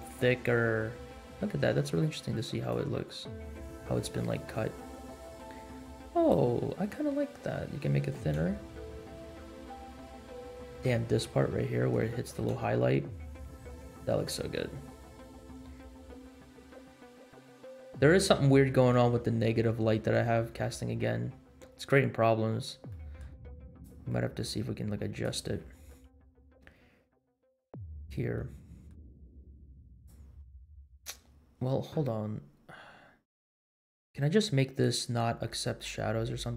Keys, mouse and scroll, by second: 0.7 scroll up 2, 2.6-6.4 drag, 6.6-7.3 scroll down 5, 7.7-8.2 shift+middle drag, 8.5 space, 10.5 space, 10.9 shift+middle drag, 11.4-11.7 scroll up 4, 12.1 shift+middle drag, 12.6 space, 14.5-15.9 scroll down 6, 16.1-16.8 scroll up 4, 17.3 space, 18.1 scroll up 2, 18.5-18.9 shift+middle drag, 20.6-21.3 scroll down 2, 21.5-22.7 scroll down 5, 22.8-23.1 middle drag, 23.7-24.1 drag, 24.3 middle click, 25.2 click, 25.9-27.0 middle drag, 27.3 scroll up 1, 27.9 click, 28.6 middle drag, 29.9 click, 30.8 click, 34.8 click, 35.3-36.5 scroll down 6.